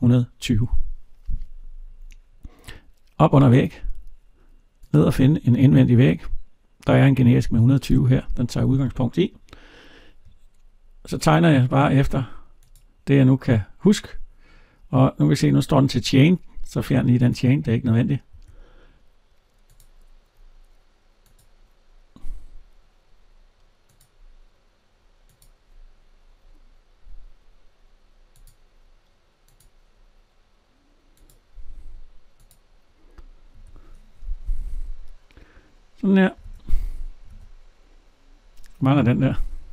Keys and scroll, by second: 18.2 Escape, 33.3 Escape, 34.4 alt+Tab.